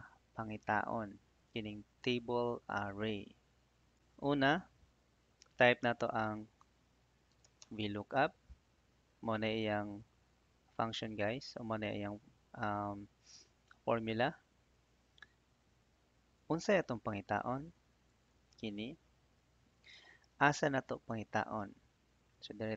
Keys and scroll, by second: 6.3 =, 7.8 Tab, 19.2 /.